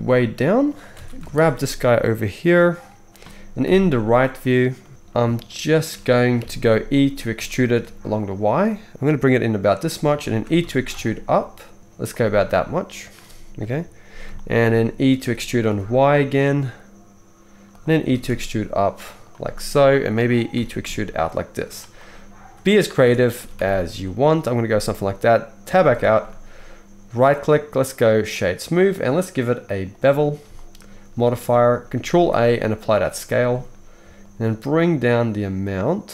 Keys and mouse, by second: 0.9 alt+a, 1.0 shift+middle click, 1.3 shift+click, 1.4 shift+middle click, 1.8-5.0 middle drag, 3.6 KP_3, 5.7-27.2 shift+middle drag, 6.4 KP_3, 7.3 e, 10.6 e, 13.6 KP_3, 15.1 e, 18.0 e, 20.5 e, 23.0 a, 23.4 s, 25.6 Tab, 27.2-29.2 right drag, 29.2-32.1 middle drag, 32.1 ctrl+a, 36.0-36.1 shift+middle drag.